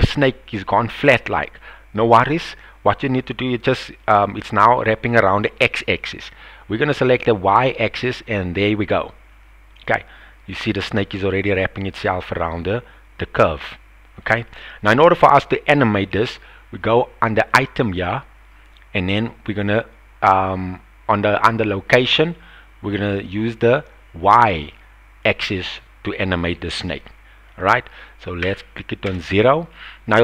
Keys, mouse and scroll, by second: 1.0 middle click, 4.0-7.3 drag, 8.7-14.2 middle drag, 14.8 KP_1, 17.5 click, 22.9-27.0 drag, 27.5-29.8 drag.